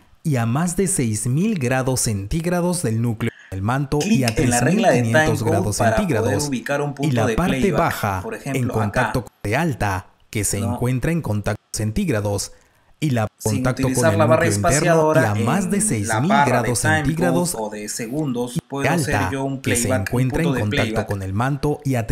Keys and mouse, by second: 0.8 Delete, 3.0 click, 9.0 click, 18.3 click.